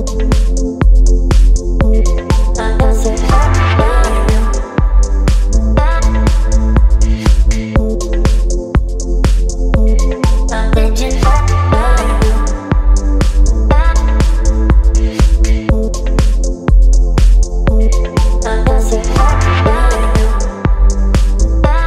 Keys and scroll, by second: 9.3 space, 14.7 space, 19.0 Delete.